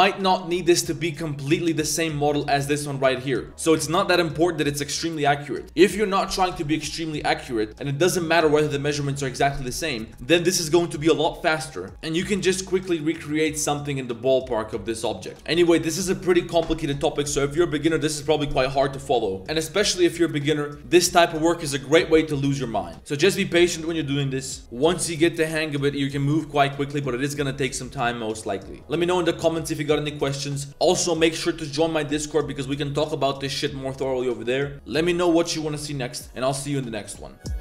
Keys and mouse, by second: 0.0 drag, 1.1-1.6 drag, 1.9 drag, 2.5-3.7 drag, 3.9-4.2 drag, 5.3-5.6 drag, 6.2 click, 7.4-7.8 middle drag, 8.4 middle drag, 9.8 middle drag, 10.2 middle drag, 11.0 middle drag, 11.5 middle drag, 11.9 middle click, 13.7 middle click, 14.7 middle click, 19.4 middle click, 20.4 middle click, 33.8 click.